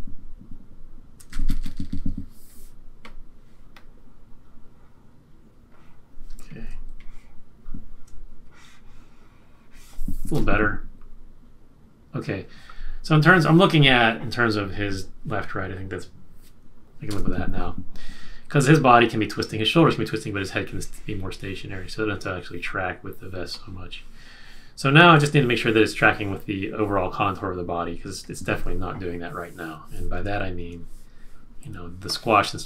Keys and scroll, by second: 1.3-1.7 Left, 1.5 Left, 1.8 Left, 1.9 Left, 10.3 Return, 17.0 Return, 31.6 z.